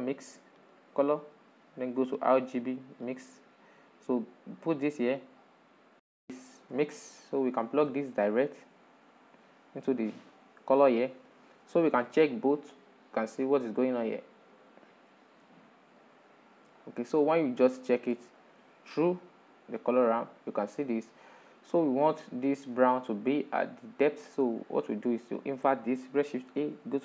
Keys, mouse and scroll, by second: 3.1-6.0 drag, 6.3-6.7 shift+middle drag, 6.7 scroll down 6, 7.2-8.3 shift+middle drag, 8.3 drag, 11.2 ctrl+shift+click, 13.0-15.9 middle drag, 15.9-16.3 scroll up 3, 16.3-17.9 shift+middle drag, 17.9 ctrl+shift+click, 19.2-20.5 middle drag, 20.5-21.4 drag, 21.4-25.8 middle drag, 25.8 shift+a.